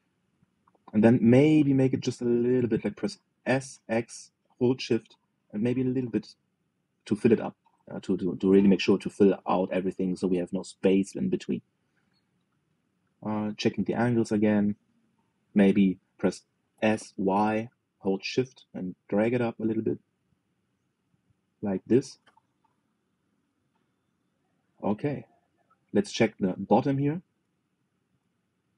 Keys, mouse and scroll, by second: 0.5-1.1 scroll down 4, 1.1 shift+middle click, 1.6-1.9 scroll down 1, 1.9-3.1 scroll up 5, 3.1 s, 12.4-12.8 scroll down 3, 12.8-13.9 shift+middle drag, 13.9-14.2 scroll up 1, 14.2 shift+middle click, 14.6-15.0 scroll up 4, 15.7-17.4 shift+middle drag, 17.4 s, 25.3-25.9 scroll down 7, 25.9 shift+scroll up 1, 25.9-28.2 shift+middle drag, 28.2-28.6 scroll up 4, 28.6 shift+middle click.